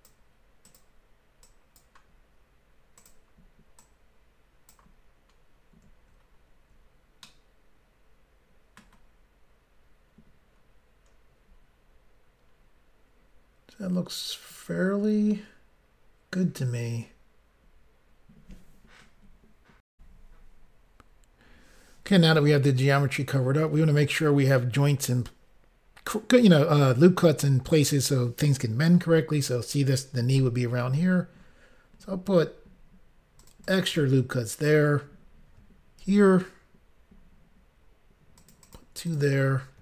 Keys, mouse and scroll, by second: 0.7 click, 0.8 click, 1.4 click, 3.0 click, 3.1 click, 3.8 click, 5.4 scroll down 1, 6.3 scroll down 1, 7.2 shift+middle click, 12.6-13.8 scroll down 1, 19.9 Insert, 30.3 ctrl+r, 30.9-31.5 scroll up 2, 32.6 scroll up 1, 33.4 click, 33.5 click, 33.6 click, 33.7 double click, 33.9 double click, 34.0 double click, 36.0 ctrl+r, 37.3 scroll up 1, 38.4 click, 38.6 click, 39.0 click, 39.1 double click.